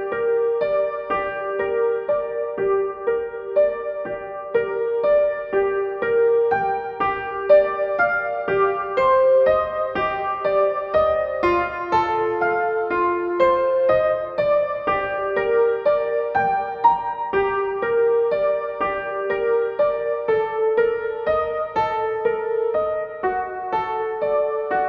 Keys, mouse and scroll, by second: 0.9 b, 1.2 shift+a, 1.5 shift+space, 2.8-5.6 typing, 7.2-11.0 drag, 11.0-13.1 shift+drag, 13.1 Down, 13.6 Left, 13.9 Up, 14.7-24.3 drag, 24.3 ctrl+g.